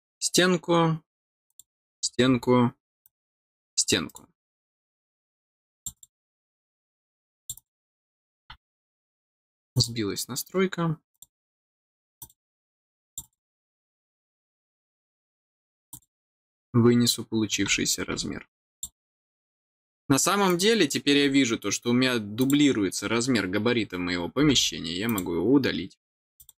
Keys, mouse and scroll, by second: 1.4 click, 3.0 click, 4.0 right click, 5.7 click, 5.9 click, 7.2 click, 7.5 click, 9.7 click, 11.1 click, 12.1 click, 13.0 click, 15.9 click, 18.7 click, 20.4 click, 22.3 click, 25.0 click, 26.3 click.